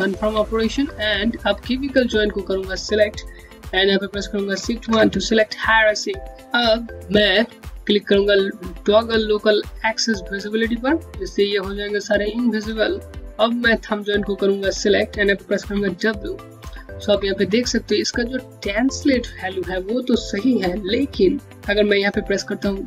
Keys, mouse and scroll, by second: 0.2 alt+middle click, 0.5 Home, 4.5 shift+1, 10.2 shift+1, 10.2 click, 13.1 scroll down 1, 13.2 scroll up 1, 15.5 w, 15.9 scroll up 1, 16.5 alt+middle click.